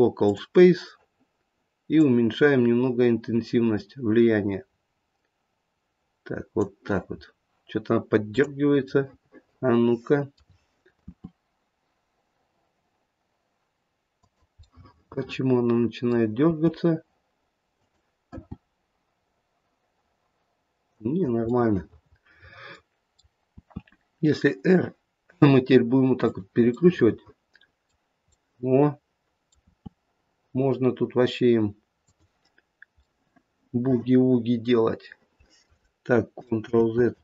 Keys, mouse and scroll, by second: 1.9 click, 7.3-8.3 scroll down 1, 8.3 click, 8.9 middle click, 11.1 r, 14.7 middle click, 15.0 middle click, 15.2 middle click, 16.4 r, 18.3 g, 21.6 middle click, 22.2 middle click, 22.6 middle click, 22.8 middle click, 23.4 r, 26.8 middle click, 28.3 middle click, 29.6 r, 33.1 middle click, 33.7 middle click, 33.9 middle click, 36.7 ctrl+z.